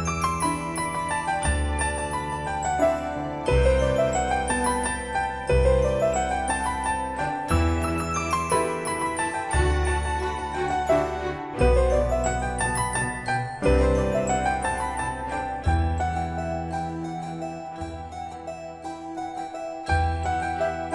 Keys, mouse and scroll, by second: 13.9-14.7 scroll up 1, 14.7-17.1 middle drag, 19.4 click.